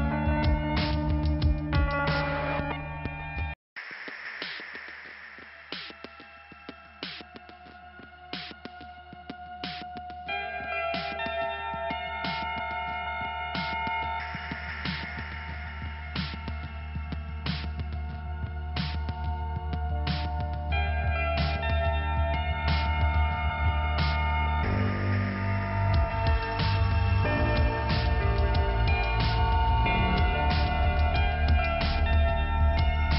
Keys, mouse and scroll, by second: 0.6 click, 1.0 click, 3.1 click, 3.5 click, 3.9 click, 4.9 click, 8.6 click, 11.8 click, 11.9 click, 12.1 click, 12.2 double click, 13.0 double click, 14.9 click, 15.3 click, 15.4 double click, 16.5 double click, 18.7-19.5 scroll up 2, 19.5 click, 20.0 click, 22.6 click, 23.4 click, 25.6 click, 25.7 click, 26.6 click, 27.1 middle click, 28.1 click, 30.5 click, 31.1 click, 32.9 scroll down 1.